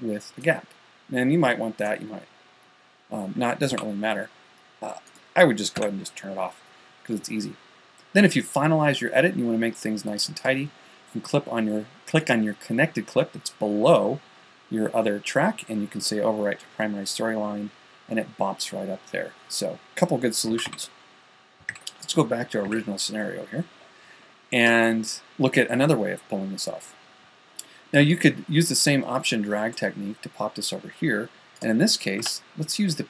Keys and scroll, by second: 4.2 super+z, 21.0 super+z, 32.7 p.